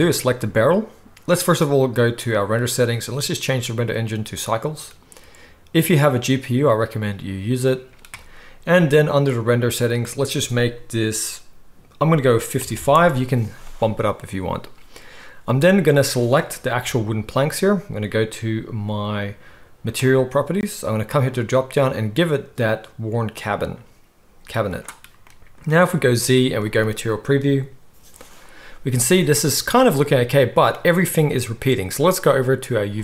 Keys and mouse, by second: 0.1-2.3 middle drag, 2.3-3.6 right drag, 3.6-16.4 middle drag, 12.7 5, 16.4 right click, 16.8 g, 17.4-19.9 middle drag, 19.9 click, 20.1-21.3 middle drag, 21.3-33.0 drag, 26.0 z.